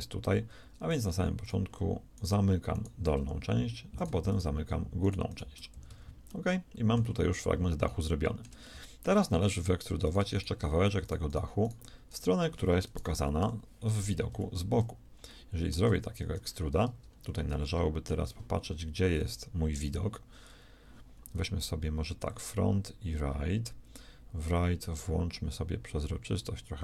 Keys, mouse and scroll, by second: 0.8-3.2 shift+right drag, 3.2 shift+f, 4.5-6.4 shift+right drag, 5.7 f, 5.9 a, 6.2 click, 6.6 middle click, 7.2 middle click, 7.8-11.1 middle drag, 10.0-11.1 shift+drag, 10.0-11.5 shift+right drag, 13.4 KP_3, 14.2 z, 22.2-24.1 drag, 25.4-26.8 drag.